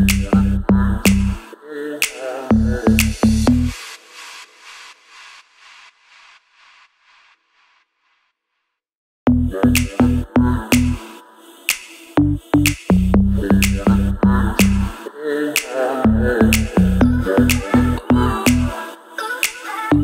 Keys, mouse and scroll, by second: 0.0-0.5 click, 0.9 ctrl+], 1.8-2.2 shift+click, 2.6 drag, 3.1 click, 3.9-4.4 drag, 5.0-5.4 shift+drag, 6.5 click, 7.4 ctrl+[, 9.2 click, 9.6-10.0 alt+click, 10.3 right click, 11.1 click, 11.4 right click, 12.0 click, 13.4 click, 16.1 right click, 16.7 click, 17.7 click.